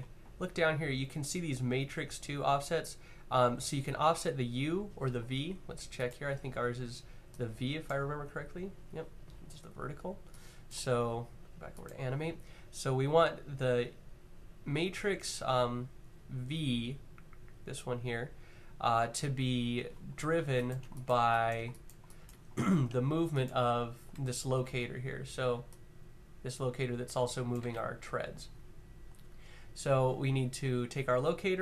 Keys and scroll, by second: 24.3 w, 27.3 w, 27.4 z.